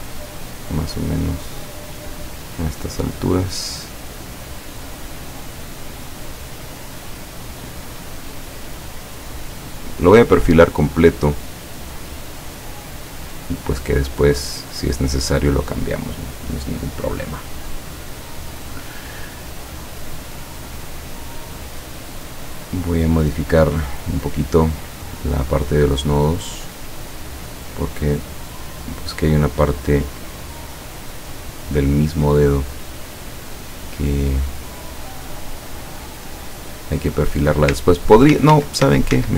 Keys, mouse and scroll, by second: 3.4 click, 4.1 click, 5.1 click, 6.4 click, 7.2 click, 9.3 click, 10.3 click, 11.1 click, 11.7 click, 12.6 click, 14.8 click, 15.3 click, 23.1 click, 25.7-27.1 drag, 27.5 click, 28.7 click, 29.7-31.1 drag, 35.1-36.4 drag, 38.4 ctrl+z.